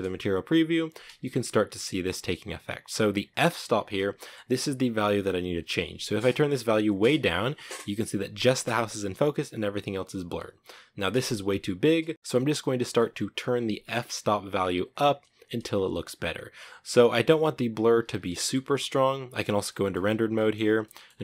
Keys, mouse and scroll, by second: 6.5-9.5 drag, 9.5 scroll up 1, 10.1-10.7 scroll down 1, 12.1-17.9 drag, 17.9 z, 18.1-19.7 shift+middle drag, 19.7-20.1 scroll up 4, 20.1 shift+middle click, 20.8 scroll up 2.